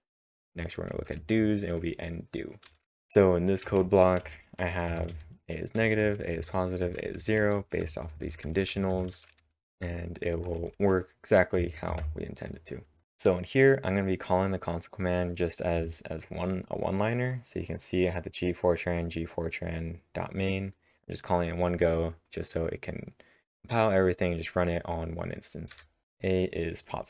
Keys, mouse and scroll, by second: 0.1-1.4 typing, 3.6 typing, 6.1-10.2 typing, 11.9 ctrl+`, 25.7 Return, 25.7 Tab, 25.7 typing, 26.0 Up, 26.0-26.5 scroll down 1.